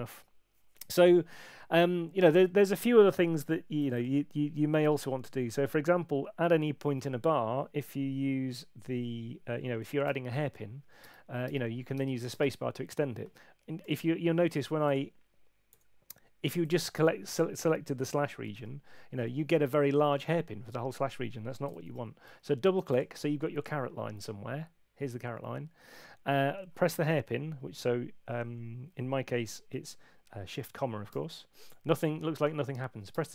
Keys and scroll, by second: 6.9 Right, 10.0 shift+,, 11.0 space, 13.8 Home, 15.7 Escape, 17.4 BackSpace, 18.5 shift+,, 21.7 super+z, 31.1 shift+,, 33.1 space.